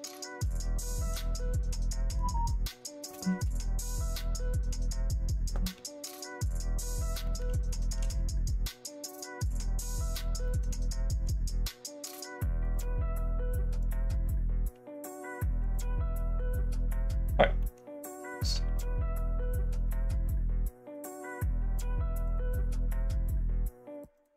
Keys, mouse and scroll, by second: 0.7 shift+middle click, 1.3 middle click, 7.2 middle click, 7.6 shift+middle click, 8.0-9.4 middle drag, 9.7 shift+middle click, 10.4 middle click, 12.6 click, 13.7 click, 15.5 click, 17.5 middle click, 18.2 click, 18.6 ctrl+a, 19.7 click, 22.2 click, 24.1 click.